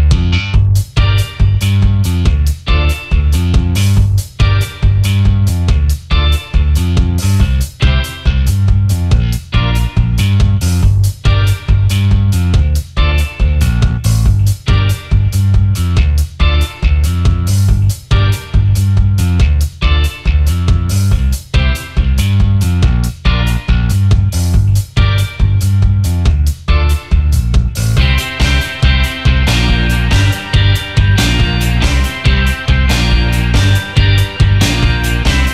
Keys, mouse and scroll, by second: 2.3 alt+scroll up 1, 3.0 shift+click, 4.1 alt+scroll down 1, 5.8 alt+scroll up 1, 7.3 space, 9.5 right click, 11.7 alt+scroll up 1, 12.7 shift+click, 14.7 alt+scroll down 1, 15.0 space, 15.5 alt+scroll up 2, 16.8 alt+click, 17.5-18.0 alt+scroll down 3, 18.1 alt+scroll up 1, 20.9 double click, 22.2 ctrl+c, 22.4 ctrl+f, 24.8 ctrl+8, 28.2-30.2 scroll down 1, 31.0 BackSpace, 31.1 BackSpace, 32.0 double click, 33.7 alt+scroll up 1.